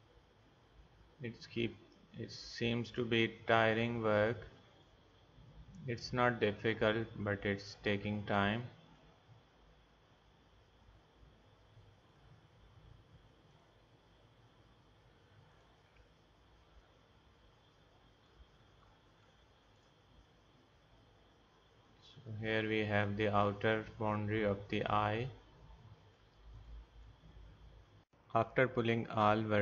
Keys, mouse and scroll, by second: 3.7-6.7 drag, 8.9-12.1 drag, 12.1-13.5 middle drag, 19.0 middle click, 19.2 middle click, 19.8 middle click, 23.4-26.1 right drag, 26.5-28.0 right drag.